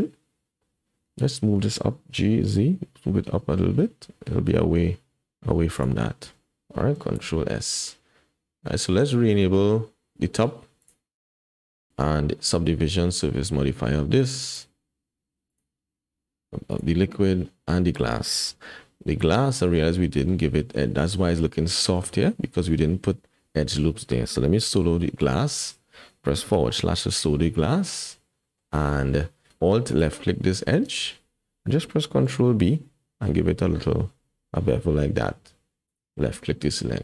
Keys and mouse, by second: 2.2 g, 6.3 Tab, 7.2 ctrl+s, 10.8 click, 11.4 middle click, 11.9 middle click, 14.5 click, 16.7 click, 17.5 middle click, 19.6 click, 22.0 Tab, 26.7 /, 28.3 click, 32.3 ctrl+b.